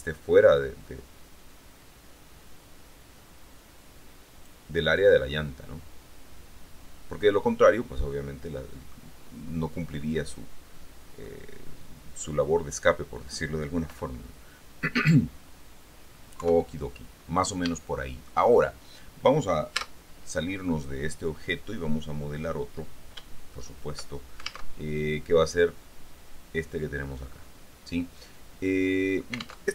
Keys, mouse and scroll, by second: 0.3 scroll down 1, 1.0-1.7 scroll up 2, 5.5-9.3 drag, 9.5-10.4 scroll up 2, 10.4 scroll up 1, 11.4-13.7 drag, 16.5 KP_3, 17.4-17.9 scroll down 1, 17.9 shift+click, 18.7 shift+middle click, 20.0 Tab, 20.9-22.1 scroll down 2, 25.0 alt+Tab.